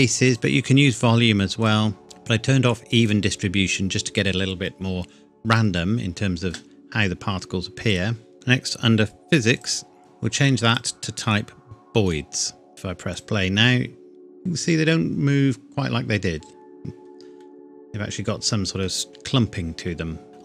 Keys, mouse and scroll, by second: 0.3 click, 3.0 click, 7.9 click, 8.3-8.9 scroll down 1, 9.5 click, 10.0-10.4 scroll down 1, 10.7 click, 13.1 click, 17.4 middle click, 19.1 KP_1.